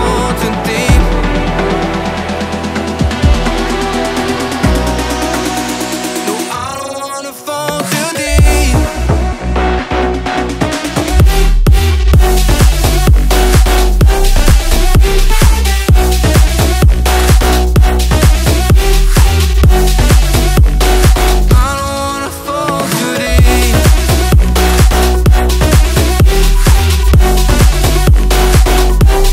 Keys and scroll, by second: 2.1 alt+Right, 3.5-5.8 typing, 6.1 Escape, 8.1 BackSpace, 8.4 a, 8.7 Escape, 11.3 9, 11.5 b, 11.5 9, 12.0 Return, 13.0 i, 18.1 alt+Tab, 19.3 Tab, 21.9 ctrl+g, 23.7 ctrl+g, 24.6 ctrl+g, 25.4 s, 25.5 e, 25.6 a, 25.8 c, 26.3 Return, 28.7 Delete.